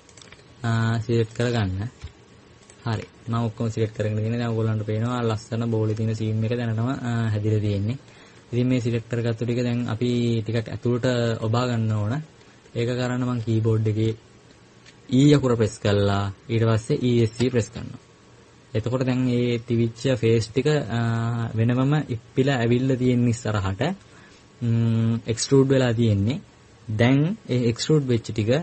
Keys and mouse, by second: 5.6 click, 5.6 right click, 5.8 right click, 9.1-10.1 middle drag, 12.5-14.3 middle drag.